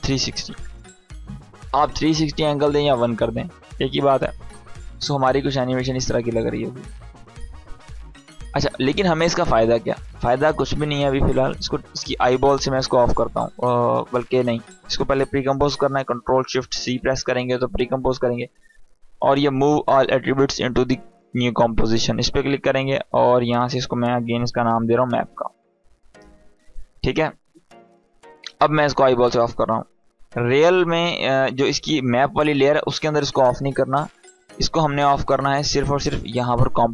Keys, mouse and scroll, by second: 4.7-8.4 drag, 16.3 ctrl+shift+c, 17.6 click, 22.6-23.2 click, 23.6 BackSpace, 24.4 shift+m, 25.1 a, 25.5 Return, 27.4 click, 34.2 click.